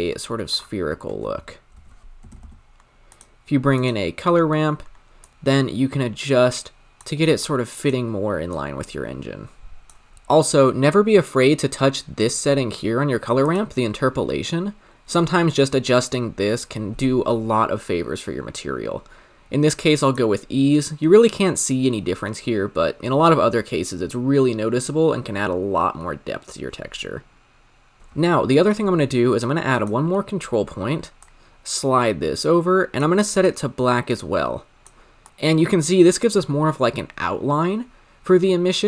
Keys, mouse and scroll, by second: 3.1 o, 4.4 middle click, 4.6-5.3 scroll up 1, 5.3-11.4 drag, 12.0-12.7 scroll down 3, 12.7-13.4 middle drag, 13.4-20.2 drag, 23.2-24.0 scroll down 6, 24.0-28.0 scroll down 1, 28.0-33.5 drag, 35.2-38.8 drag.